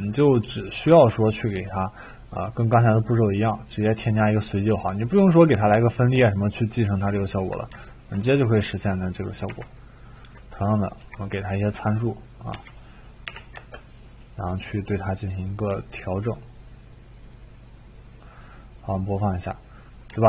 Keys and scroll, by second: 9.5-11.0 typing, 12.5-13.2 typing, 13.5 Return, 16.0-16.8 typing.